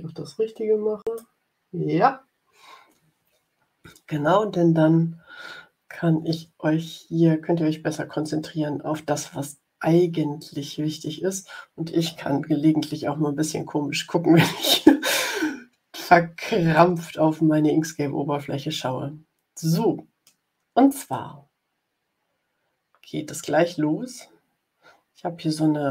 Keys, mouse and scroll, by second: 0.9 click, 16.6-19.3 middle drag, 19.1 click, 19.3 click, 20.2 middle click, 21.0-25.9 middle drag.